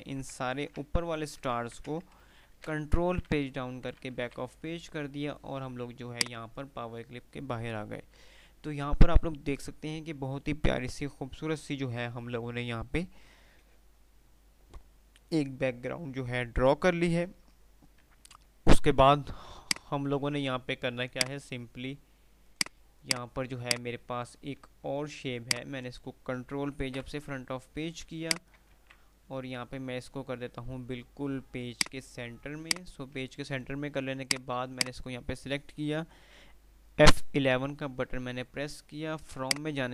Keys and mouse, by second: 0.8 ctrl+g, 0.8 Delete, 1.9 ctrl+z, 2.8 shift+Page_Down, 4.0-4.9 typing, 6.4 F2, 6.4 click, 18.4 F3, 19.8 click, 20.2 F2, 21.1-21.9 F2, 21.1 click, 22.8 click, 24.8 F2, 25.7-26.4 F2, 25.7 click, 27.1 shift+Page_Up, 28.4 shift+click, 28.8 c, 29.7 F3, 31.7 F2, 34.2 click, 37.5 F11, 39.5 click.